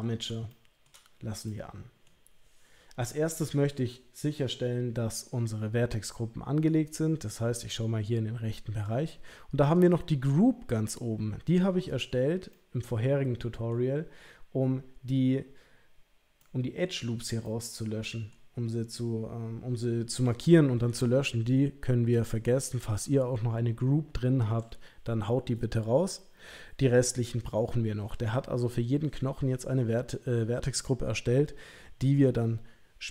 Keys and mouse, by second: 0.5 shift+middle click, 1.4 middle click, 6.8-8.8 drag, 9.7 click, 12.5-13.7 middle drag, 16.4 middle click, 17.4 middle click.